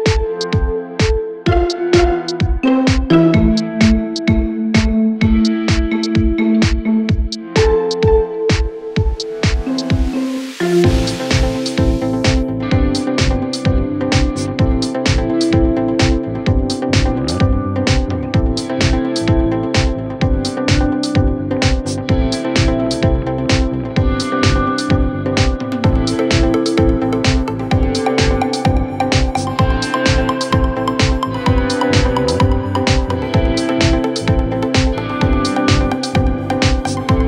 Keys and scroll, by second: 5.8 Escape, 5.9 ctrl+z, 6.7 4, 8.3 3, 11.0 ], 15.3 4, 19.9 ctrl+z, 22.0 Delete, 28.6 ctrl+d, 28.8 Escape, 30.8 ctrl+d, 30.8 Escape, 31.6 ctrl+d, 31.7 Escape, 32.8 ctrl+d, 32.9 Escape, 34.4 ctrl+d, 34.4 Escape, 35.2 ctrl+d, 35.3 Escape, 36.0 ctrl+d, 36.1 Escape, 36.8 ctrl+d, 36.9 Escape.